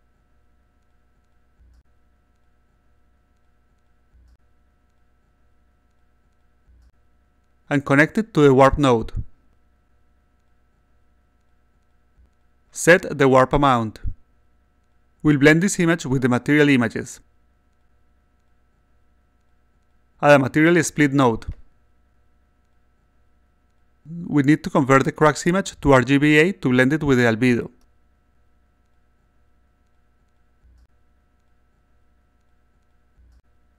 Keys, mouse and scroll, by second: 0.0-1.5 typing, 4.5 6, 5.2 6, 8.4 click, 10.5 click, 12.0 click, 12.6 3, 17.2-18.3 drag, 18.9 click, 20.3-21.9 drag, 23.7 click, 24.4-25.8 drag, 26.2 click, 28.8 click, 29.3-31.2 drag, 32.1 click.